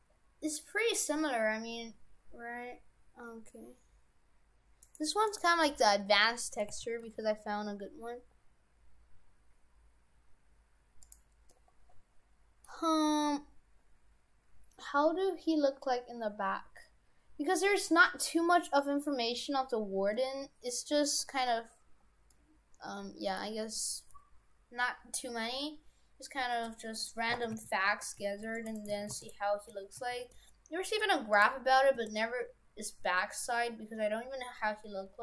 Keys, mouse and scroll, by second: 4.9 right click, 5.1 Tab, 5.3 right click, 6.2 middle click, 6.7 a, 7.1 g, 11.5 middle click, 13.2-14.1 scroll down 1, 22.3 middle click, 27.0 right click, 27.4 shift+f, 28.8 right click, 29.0 shift+f, 30.0 a, 30.3 g, 32.0 r.